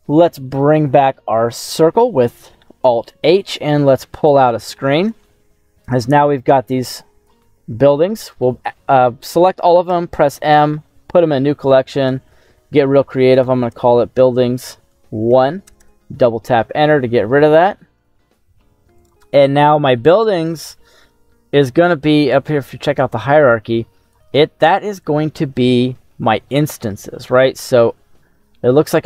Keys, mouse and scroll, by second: 0.3-3.1 middle drag, 4.2 click, 5.4 scroll down 1, 5.5 middle click, 6.8 click, 9.8 m, 15.8 Return, 23.0-24.2 drag, 28.8 click.